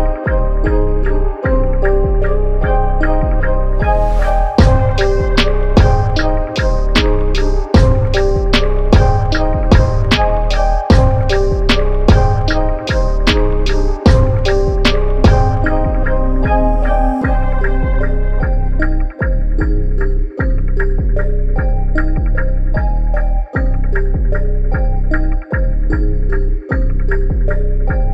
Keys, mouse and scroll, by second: 10.5 click, 13.4-15.0 typing, 15.1 click, 16.6 click, 23.3 click, 27.1 click.